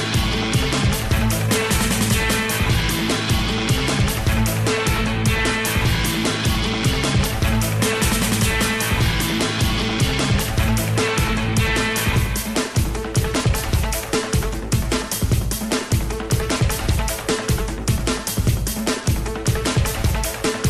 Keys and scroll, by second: 17.0 i.